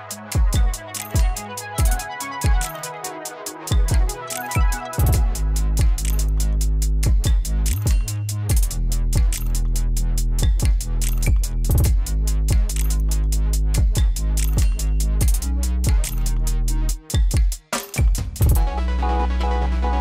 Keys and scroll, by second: 19.3 F4.